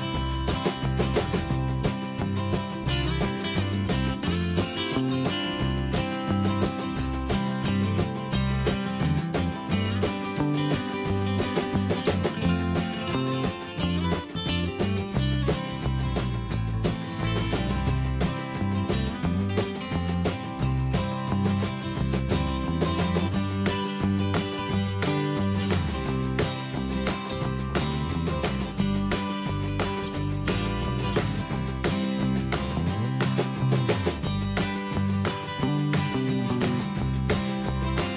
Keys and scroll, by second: 7.3 ctrl+z, 27.3 ctrl+z.